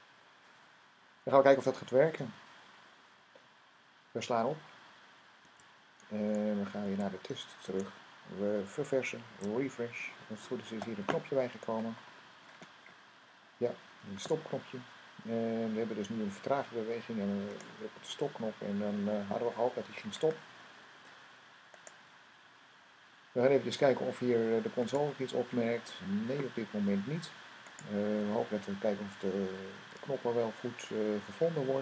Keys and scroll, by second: 5.3 super+s, 9.1 super+r.